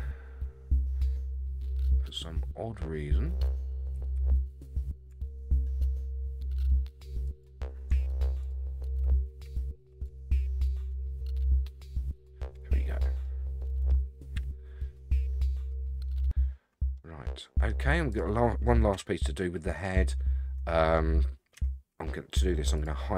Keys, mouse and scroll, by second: 0.4-1.3 scroll up 2, 2.2-2.6 scroll down 1, 3.9 g, 8.4 click, 9.4 g, 12.7-13.2 scroll down 5, 13.2-13.9 middle drag, 14.3 KP_1, 15.0-15.8 scroll up 3, 16.2 scroll up 3, 16.9-17.7 middle drag, 18.1 click, 18.9 Tab, 19.3-19.8 scroll up 4, 19.8-20.9 middle drag, 21.5 Tab, 22.1-22.5 scroll down 6, 22.7 click.